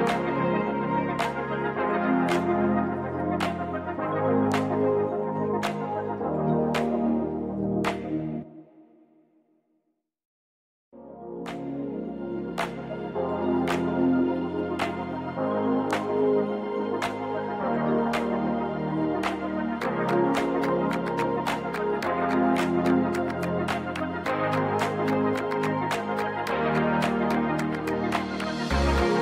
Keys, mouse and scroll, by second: 2.3 KP_3, 2.8-3.3 scroll up 2, 6.9-9.0 typing, 9.8 Return, 10.9 s, 12.1 click, 12.6-13.0 middle drag, 13.3 g, 13.5 y, 13.9 x, 16.3 click, 16.7-18.2 middle drag, 18.7 middle click, 19.8 KP_1, 20.4 KP_3, 23.2 click, 24.5 click, 26.8 click, 28.4 click.